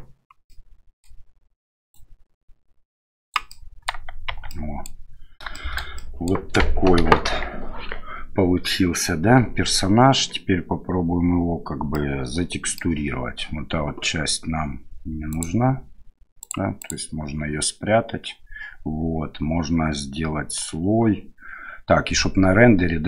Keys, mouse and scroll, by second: 0.4 middle click, 1.9-3.3 drag, 3.6 middle click, 4.3 Tab, 4.5-4.9 middle drag, 5.5 middle drag, 5.9 middle click, 7.0 KP_1, 11.9-12.8 middle drag, 15.3 click, 16.4 click, 16.8 click.